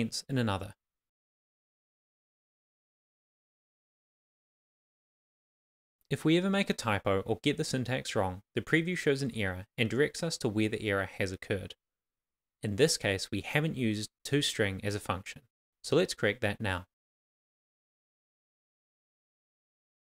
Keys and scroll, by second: 0.1 shift+,, 0.6 shift+., 1.3 Left, 1.8 Right, 2.4 shift+,, 2.8 shift+., 3.8 shift+[, 3.9 shift+], 4.6 Left, 7.2 shift+[, 7.3 shift+], 7.3 Left, 9.6 shift+3, 11.1 super+s, 13.7-14.5 typing.